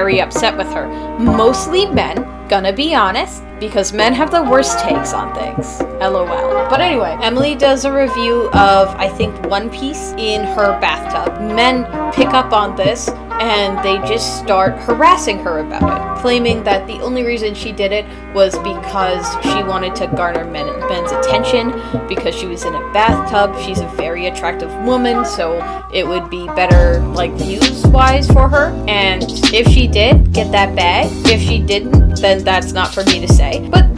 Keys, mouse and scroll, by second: 15.1-16.6 typing.